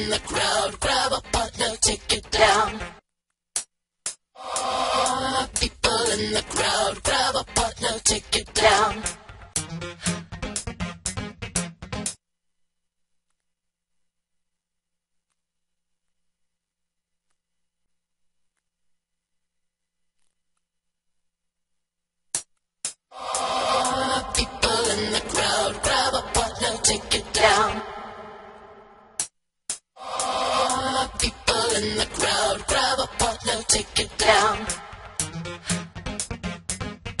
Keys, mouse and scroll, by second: 27.3 click, 27.7-28.3 drag, 29.2 drag.